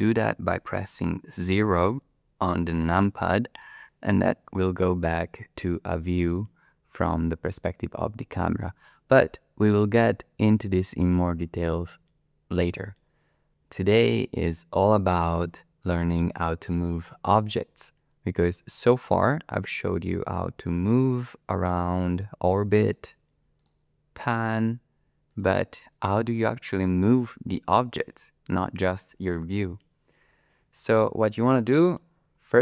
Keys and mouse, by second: 3.7 KP_0, 14.0-17.4 middle drag, 18.9-22.9 middle drag, 23.6-25.4 shift+middle drag.